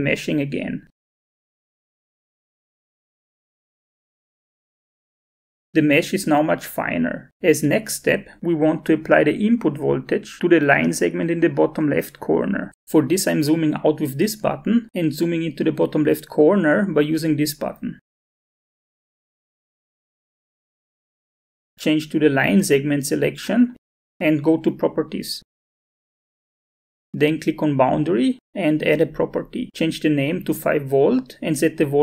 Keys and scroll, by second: 7.9 alt+Tab, 31.1 5.